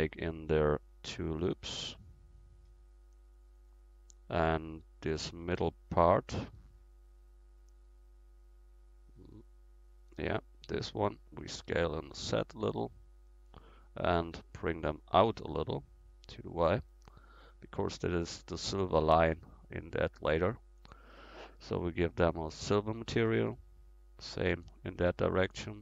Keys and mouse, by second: 1.2 ctrl+r, 5.9-8.1 drag, 7.1-12.4 right drag, 11.7 s, 14.8-16.3 middle drag, 15.3 e, 16.3-18.3 drag, 18.7-20.9 middle drag, 20.9-22.4 right drag, 22.4-25.5 drag, 24.1-25.8 right drag.